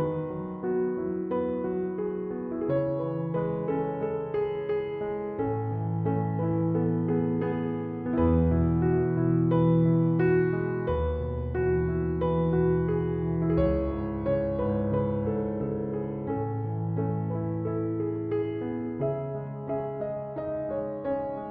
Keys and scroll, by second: 13.8 ctrl+8.